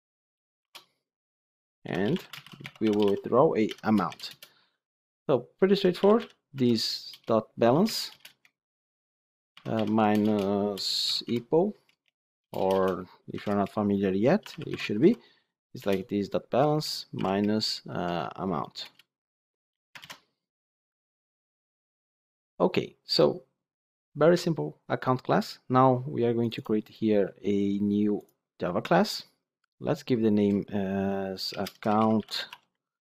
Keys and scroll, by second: 8.0 Return, 9.8 Return, 15.7 Return, 17.4 Return, 19.9 ctrl+alt+l.